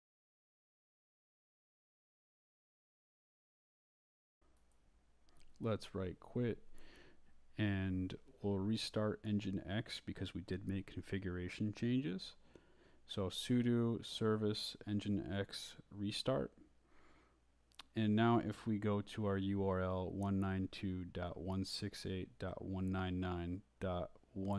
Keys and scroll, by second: 0.0 shift+Left, 1.0 Return, 1.5 Up, 2.0 Down, 2.4-8.9 typing, 7.4 Escape, 9.3 Return, 11.7-12.8 typing, 14.1-17.9 typing, 24.0-24.5 typing.